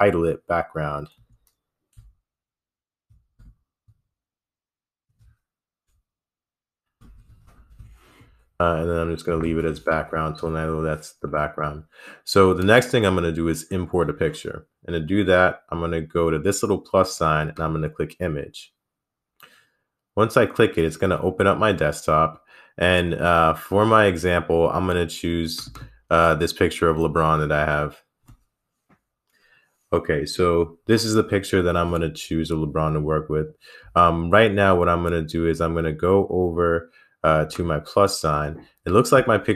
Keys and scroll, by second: 1.4 a, 1.9 c, 3.2-3.8 typing, 5.3 typing, 6.9-8.1 typing.